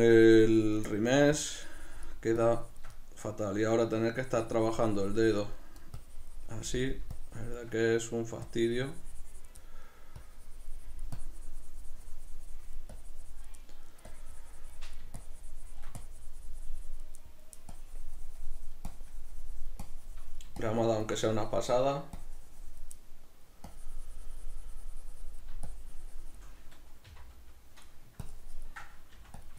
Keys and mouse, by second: 1.0 middle click, 1.4-3.0 drag, 3.0-4.3 middle drag, 4.3-5.6 drag, 5.6 middle click, 6.0-8.0 drag, 8.0 middle click, 8.6-9.7 drag, 9.7 middle click, 10.3-13.6 drag, 13.6 middle click, 14.1-17.3 drag, 17.3 middle click, 17.7-23.0 drag, 23.0 middle click, 23.8-27.4 drag, 27.2 c, 27.4 middle click, 28.3-29.5 ctrl+drag, 29.2 f.